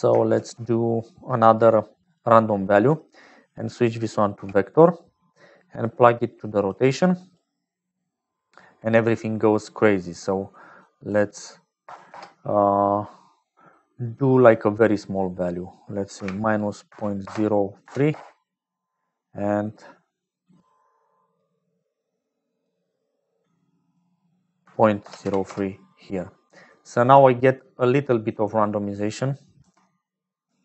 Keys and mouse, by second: 0.3 shift+a, 3.4-4.7 drag, 5.7-7.0 drag, 10.9-12.7 drag, 15.1-19.2 drag, 20.2 click, 22.4 click, 23.6-26.5 drag, 27.4 click, 27.7 click, 28.2 middle click, 29.9 m.